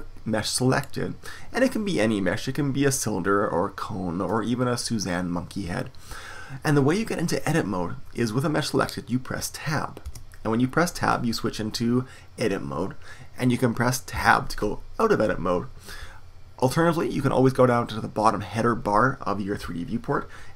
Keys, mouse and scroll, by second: 10.0 Tab, 14.1 Tab.